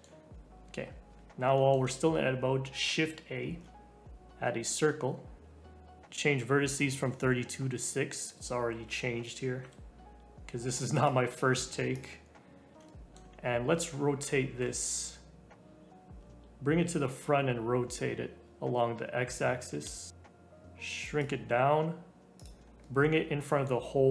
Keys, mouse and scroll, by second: 0.7 scroll down 2, 1.4-3.4 middle drag, 3.4 shift+a, 8.5 g, 11.9 click, 12.8-14.2 shift+middle drag, 14.2 r, 20.1 s, 21.4 g, 22.6 scroll up 1, 22.8-24.1 middle drag.